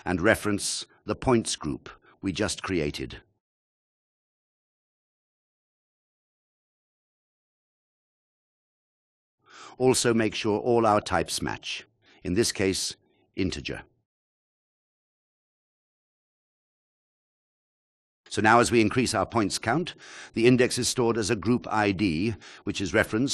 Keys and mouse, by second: 0.5 shift+a, 4.2 click, 5.7-7.4 drag, 10.7-11.7 drag, 13.0 alt+shift+click, 14.5-15.4 drag, 21.6-22.6 drag.